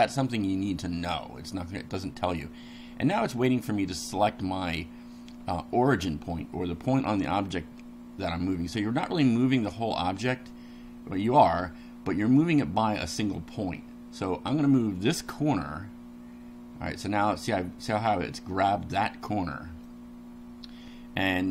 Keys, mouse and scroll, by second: 15.2 click, 19.8-21.5 middle drag.